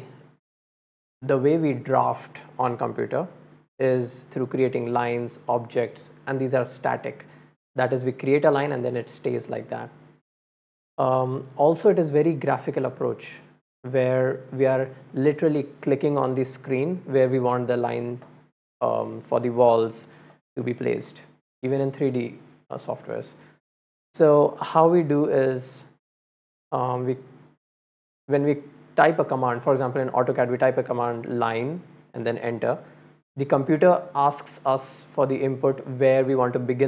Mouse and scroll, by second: 14.4 click.